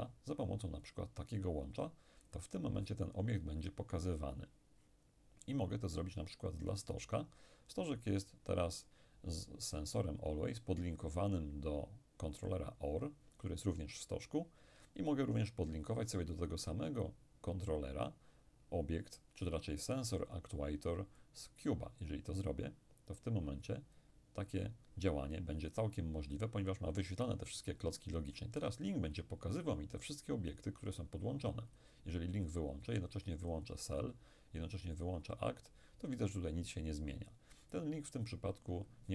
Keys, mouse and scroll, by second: 0.9-3.3 drag, 21.3-25.0 drag, 31.8 click, 33.5 click, 35.0 click.